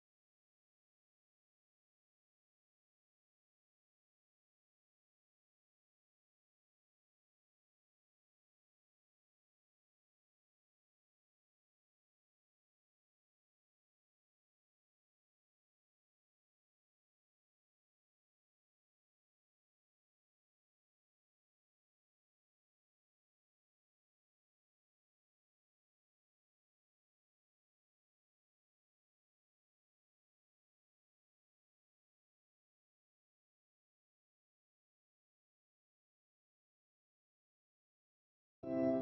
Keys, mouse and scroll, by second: 5.1-6.9 drag, 6.9-7.4 scroll down 5, 7.9-10.9 drag, 33.9 ctrl+s.